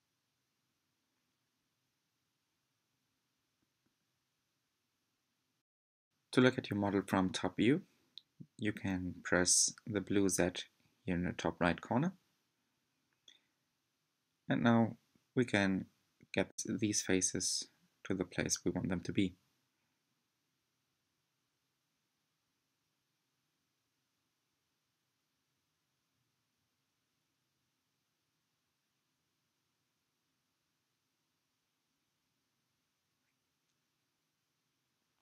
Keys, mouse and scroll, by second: 0.0-0.4 middle drag, 0.4-1.0 scroll down 3, 1.2 g, 2.7-3.7 middle drag, 3.7 scroll up 3, 4.2-5.2 middle drag, 5.2 click, 5.7 shift+click, 6.0 shift+click, 6.3 middle click, 6.6-6.9 scroll down 2, 6.9-8.8 middle drag, 8.8 g, 11.2-13.4 shift+middle drag, 13.4 click, 14.4-14.7 scroll up 5, 15.3-15.6 scroll up 2, 15.9-17.8 shift+middle drag, 17.8 g, 22.6 s, 25.8 click, 26.5 shift+click, 27.3 shift+click, 28.3 shift+click, 28.9 g, 33.2 shift+drag, 34.3 g.